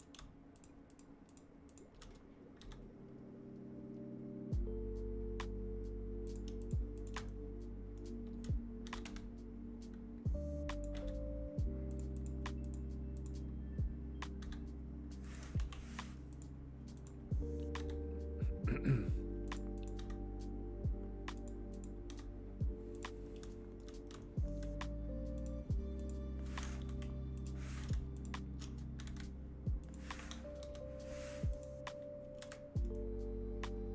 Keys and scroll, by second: 2.6 g, 8.8 g, 10.9 g, 14.3 g, 15.5 Delete, 17.7 g, 19.9 g, 26.8 Delete, 28.9 g, 30.5 KP_3.